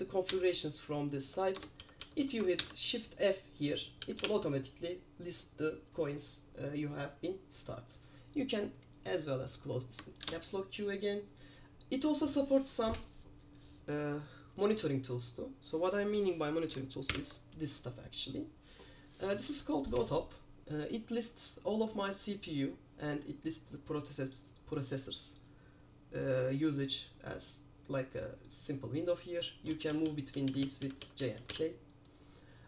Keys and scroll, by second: 1.7-4.8 typing, 9.1 Escape, 10.3 super+q, 17.2 super+p, 30.0-32.0 typing.